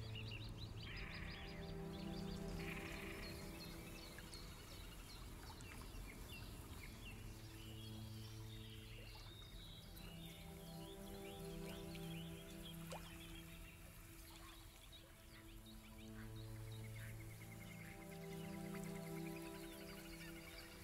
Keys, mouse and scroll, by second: 1.8 alt+scroll up 2, 2.4 alt+middle click, 4.8 click, 8.0 click, 10.3 click, 13.7 click, 18.1 click, 20.1 click.